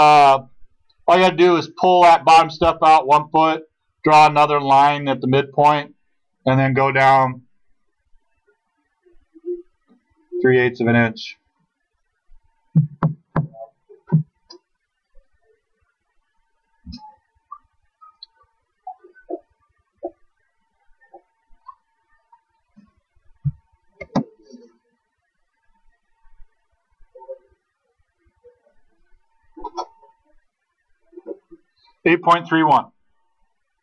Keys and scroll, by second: 24.0 space.